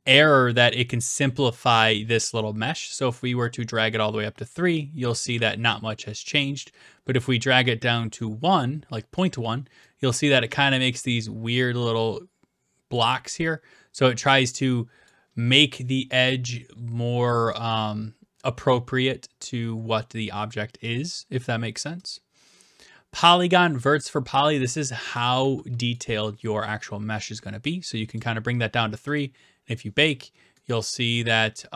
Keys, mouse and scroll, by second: 3.7 click, 4.6 click, 5.4-6.1 typing, 6.4 right click, 8.2 click, 9.3 click, 9.9-11.2 typing, 10.9 right click, 14.2-15.1 typing, 15.1 right click, 22.1-23.1 drag, 25.1 typing, 25.9-27.0 right drag, 28.2 click, 30.5-31.3 typing, 31.3 right click.